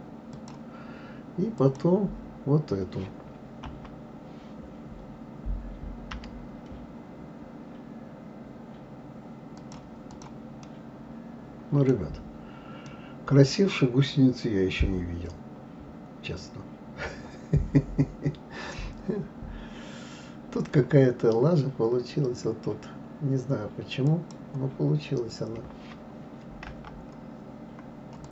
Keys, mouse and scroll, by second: 1.6 click, 3.7 KP_3, 6.1 g, 10.1 click, 10.6-12.0 middle drag, 12.0-12.9 scroll down 2, 12.9-16.0 middle drag, 21.4-24.1 scroll up 2, 24.1 click, 26.6 Delete, 28.2 click.